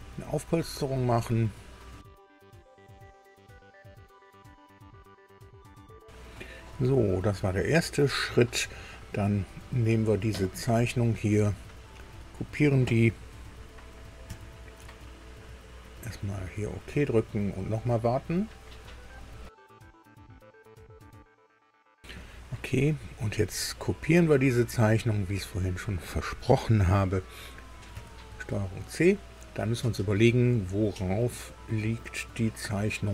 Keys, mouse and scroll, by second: 0.6 click, 7.2-8.5 middle drag, 11.3 click, 12.1 click, 14.3 ctrl+c, 16.1 click, 22.6 middle click, 24.9 click, 25.5 click, 27.9 ctrl+c.